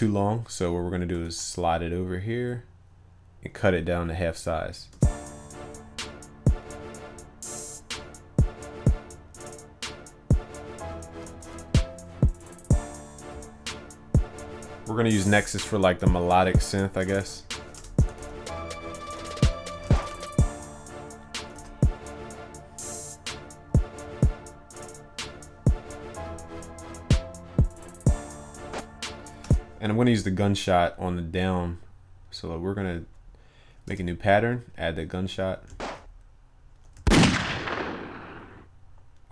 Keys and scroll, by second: 1.3 ctrl+a, 11.3 ctrl+s, 21.6 ctrl+s.